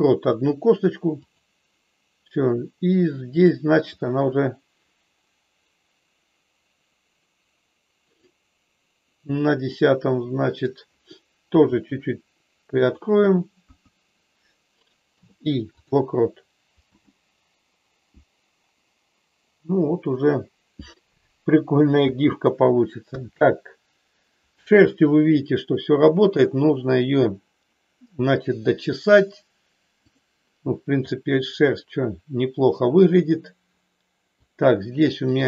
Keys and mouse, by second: 3.9-8.2 drag, 9.7-10.7 middle drag, 11.5 r, 12.8 click, 13.5 KP_1, 15.2 i, 16.8 space, 22.0 space, 23.0 KP_1, 30.0 click, 31.0-34.3 middle drag, 35.2 click.